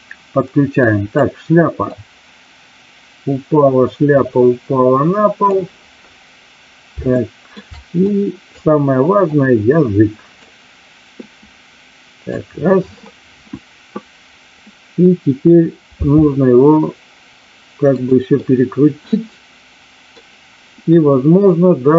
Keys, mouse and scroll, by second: 0.7-1.1 drag, 2.0-5.5 drag, 7.1-7.5 shift+middle drag, 8.1-8.7 drag, 9.2-10.3 drag, 11.2-12.3 drag, 16.0 r, 18.0 click, 18.3-20.1 middle drag.